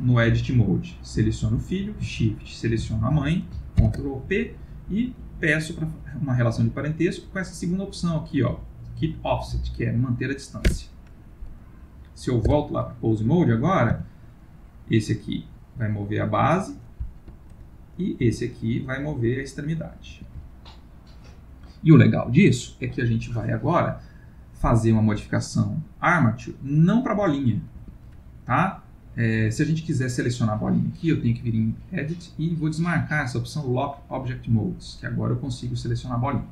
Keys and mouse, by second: 2.3 shift+click, 3.7 ctrl+p, 12.5 Tab, 13.2 click, 13.9 g, 17.9 click, 18.2 g, 26.6 click, 27.2 g, 27.8 Escape, 28.1 click, 31.5 click, 35.4 click, 36.2 g.